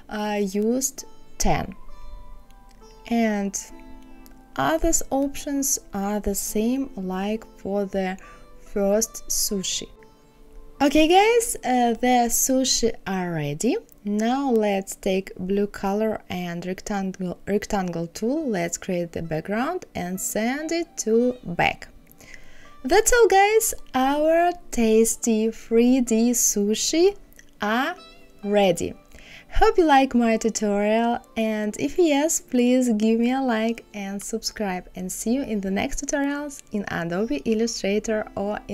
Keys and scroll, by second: 2.0 KP_1, 2.1 KP_3, 3.7 KP_Subtract, 3.8 KP_3, 4.8 KP_5.